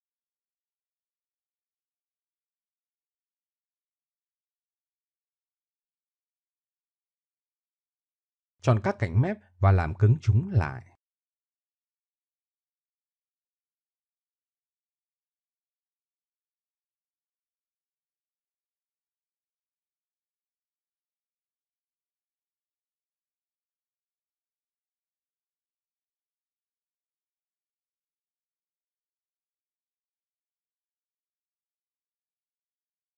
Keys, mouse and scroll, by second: 0.3 e, 1.9-3.3 middle drag, 4.8 middle click, 5.4 click, 7.5 click, 9.1 middle click, 9.2 middle click, 10.8 middle click, 11.0 Tab, 12.2 Tab, 13.2 a, 16.3 middle click, 19.0 right click, 19.1 middle click, 21.0 middle click, 21.3 middle click, 21.9 middle click, 22.8 alt+shift+e, 26.9-27.4 middle drag, 28.6 middle click, 29.7 click, 30.0 click, 30.7 click, 30.9 middle click, 32.3 shift+e.